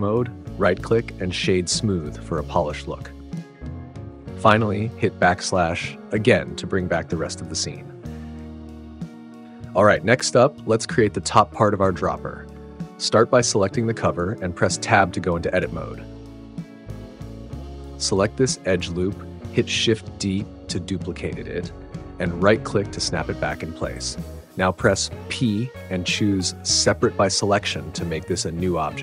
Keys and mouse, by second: 2.6 click, 6.1 /, 9.9-11.6 middle drag, 12.9-14.1 middle drag, 14.1 Tab, 16.4 middle click, 17.7 2, 20.5 shift+d, 22.8 click, 25.8 p.